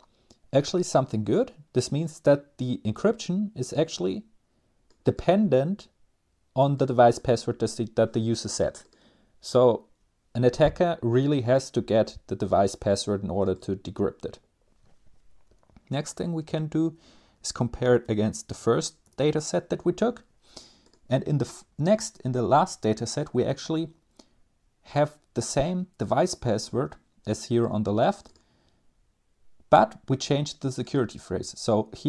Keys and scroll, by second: 15.0 Up, 15.4 Left, 16.0 Left, 16.1-16.9 Left, 17.4 typing, 18.3 End, 18.6 Return, 21.2 Down, 21.4 Down, 21.5 Down, 22.1 Down, 22.3 Down.